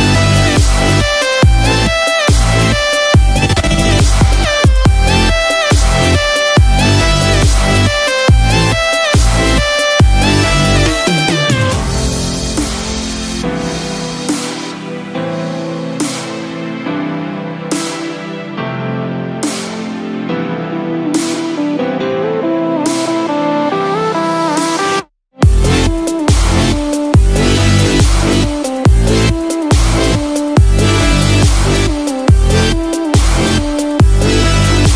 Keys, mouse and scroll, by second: 5.7 scroll down 1, 6.9 click, 6.9-9.1 scroll down 3, 16.1-16.6 scroll up 1, 17.5 scroll down 1, 18.2 click, 18.2 scroll down 1, 18.6 Delete, 19.0 click, 19.3 Delete, 19.6 click, 19.8 Delete, 20.1 click, 20.3 Delete, 27.5 Delete, 28.3 scroll down 1, 28.6 click, 29.0 Delete, 29.7-30.1 scroll down 2, 30.1 middle click, 32.3 shift+middle click, 32.7-33.2 scroll up 7, 33.5 middle click, 34.4-34.9 scroll down 2.